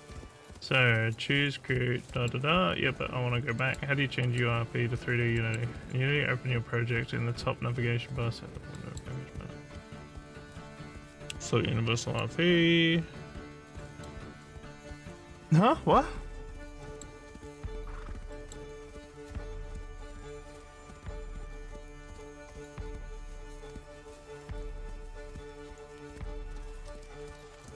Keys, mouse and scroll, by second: 2.1 middle click, 3.6 middle click, 3.6 scroll down 1, 4.3 click, 5.4 middle click, 8.8 middle click, 12.1 middle click, 13.8 middle click, 16.8 middle click, 18.3 middle click, 27.6 middle click.